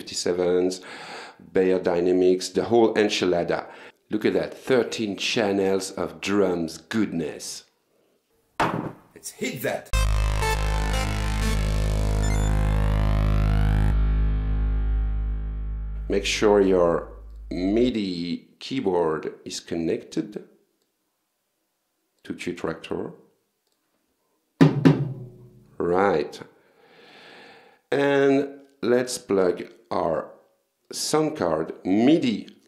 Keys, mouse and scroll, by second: 3.4-3.7 scroll down 2, 7.4-8.3 scroll up 6, 16.2 click, 17.4 click, 20.9-22.4 drag, 23.7 click, 28.1 click, 30.0 click, 30.9 click.